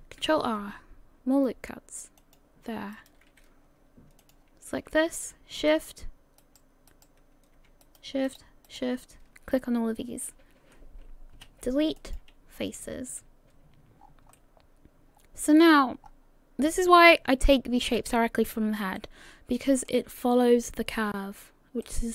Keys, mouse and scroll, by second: 0.4 ctrl+r, 4.2 click, 5.7 shift+right click, 6.4 shift+right click, 7.4 shift+right click, 7.8 shift+right click, 8.3 shift+right click, 10.3 shift+right click, 11.4 Delete, 14.0-14.4 scroll down 5, 14.4 middle click, 16.1-17.1 scroll up 5, 18.6 scroll up 2, 19.0 middle click, 21.8 middle click.